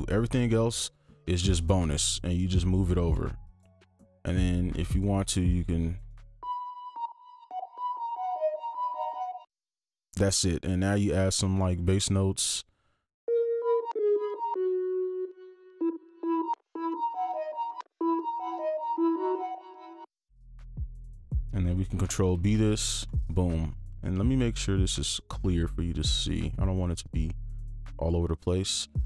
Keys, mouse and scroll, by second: 1.8 ctrl+click, 2.9 ctrl+click, 3.9 right click, 4.8 ctrl+click, 5.5 shift+click, 6.0 right click, 7.7 space, 9.4 space, 11.4-13.5 scroll down 1, 13.6 space, 13.9 space, 14.1 space, 14.5 space, 15.4-16.0 scroll down 1, 16.0 right click, 16.2 space, 16.5 space, 16.7 space, 17.7 space, 17.9 space, 18.9 double click, 20.0 space, 20.2-20.6 scroll up 1, 20.6 ctrl+click, 21.1 scroll down 1, 22.2 ctrl+b, 22.4 ctrl+b, 22.6 ctrl+b, 23.0 right click, 23.4-24.2 scroll down 1, 25.5-28.4 scroll up 1, 28.4 right click.